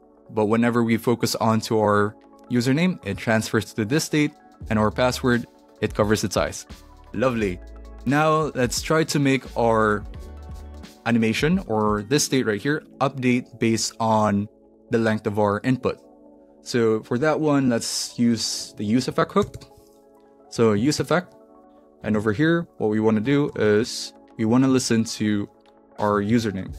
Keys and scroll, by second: 19.4 Return, 19.6-20.6 typing, 20.7 Down, 20.9 Return, 22.0 shift+9, 22.6 Right, 23.2 =, 23.5 shift+., 23.8 shift+[, 24.2 Return, 24.6 Down, 24.9 Left, 25.6-26.7 typing, 26.2 Left.